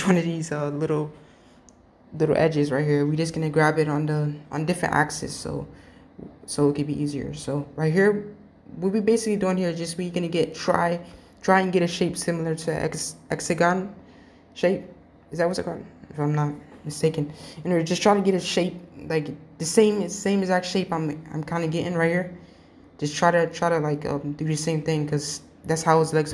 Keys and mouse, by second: 3.6 g, 8.1 g, 9.9 click, 13.1-13.6 drag, 14.2 g, 15.1 g, 19.2 g, 22.1 click, 22.9 g.